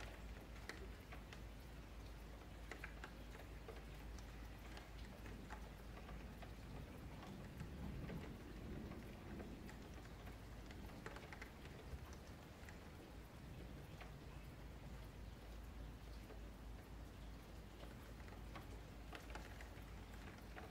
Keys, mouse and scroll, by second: 0.5 click, 1.1 shift+click, 1.8 KP_Divide, 2.2-2.5 middle drag, 2.5-3.1 scroll up 11, 3.1-3.6 shift+middle drag, 3.6 scroll up 6, 3.9-4.2 shift+middle drag, 4.2 click, 4.6-5.3 middle drag, 5.3 click, 5.7-6.6 shift+middle drag, 6.6 scroll down 3, 6.9-7.4 shift+middle drag, 7.4-7.9 scroll up 2, 7.9 click, 8.6-9.6 middle drag, 9.6 scroll up 3, 9.9 F3, 10.4-10.8 shift+middle drag, 10.8 Tab, 11.1 1, 11.7 click, 13.5 ,, 15.6 s, 18.9 middle click, 19.2 scroll down 5, 19.4 shift+middle click, 19.8 scroll down 4, 20.0-20.7 shift+middle drag.